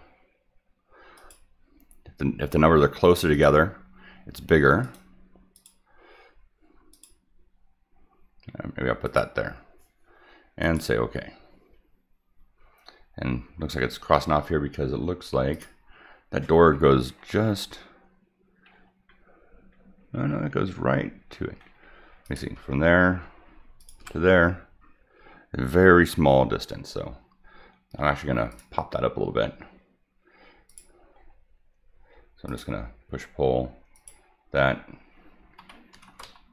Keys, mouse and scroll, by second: 1.2 click, 3.3 click, 4.8 click, 5.5 click, 6.9 click, 9.0 click, 10.6 click, 15.5 click, 18.7-19.0 middle drag, 18.7-19.0 scroll up 4, 19.9 middle click, 19.9-20.8 scroll up 3, 20.3 middle click, 20.7 middle click, 21.4 middle click, 21.6 middle click, 22.2 click, 23.8 ctrl+click, 28.5 click, 30.7 click, 31.2 scroll up 1, 32.5 click, 33.2 middle click, 33.9 click.